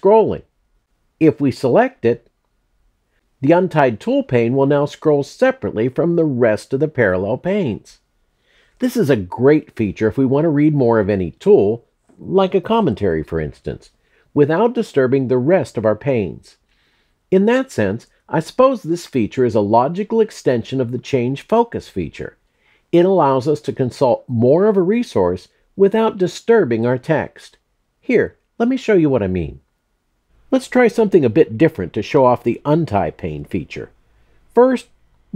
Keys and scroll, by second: 29.6 BackSpace.